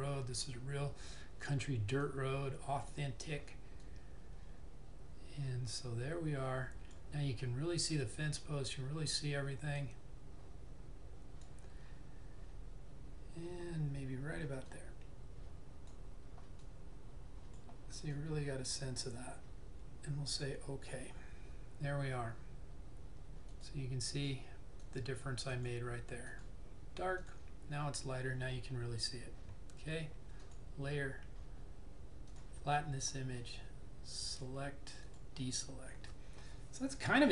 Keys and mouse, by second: 2.2 click, 2.2 typing, 9.9 click, 9.9 typing, 14.7 click, 18.3 typing, 23.5 click, 24.7 typing, 29.0-29.3 typing, 30.5 click, 30.5 typing.